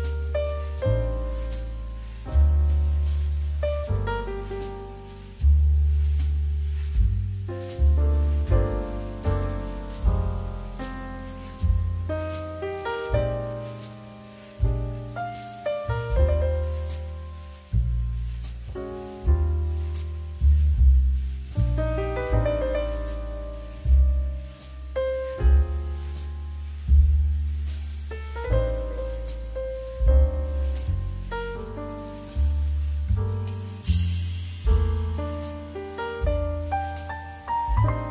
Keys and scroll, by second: 2.0 n, 6.4 m, 8.5 z, 12.6 z, 16.8 z, 17.9 space, 19.8 space, 20.7 space, 24.1 ctrl+z, 26.7 space, 27.9 q, 29.6 d, 33.7 z, 36.7 z, 37.8 x.